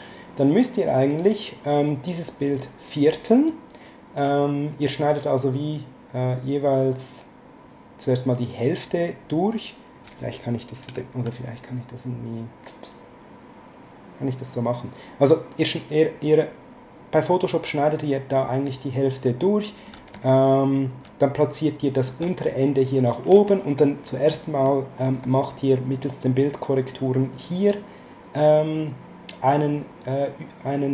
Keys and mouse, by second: 0.1 click, 11.4 shift+click, 20.2 ctrl+click, 22.9 click.